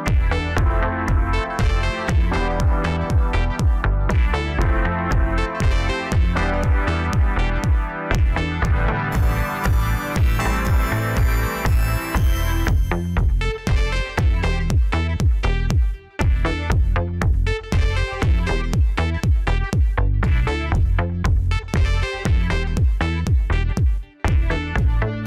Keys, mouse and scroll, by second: 4.6 Tab, 6.3-9.3 drag, 9.4-9.8 scroll down 2, 9.8 middle click, 10.8-11.2 scroll up 2, 11.7-12.3 drag, 13.0 click, 13.6-14.0 drag, 14.0-15.5 middle drag, 15.5-16.7 drag, 17.3 click, 17.8-20.8 middle drag, 20.8 click, 21.2-22.3 middle drag, 22.3-23.0 right drag, 23.0-24.1 middle drag, 24.1 KP_7.